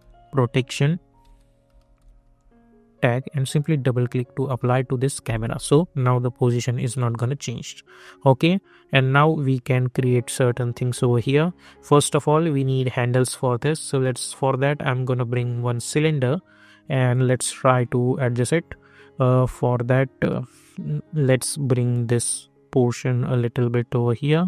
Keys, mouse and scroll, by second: 0.0-2.7 typing, 1.2 ctrl+a, 3.3 click, 7.5 click, 14.2-15.7 drag, 16.9 middle click, 20.2 middle click, 21.7-24.4 drag.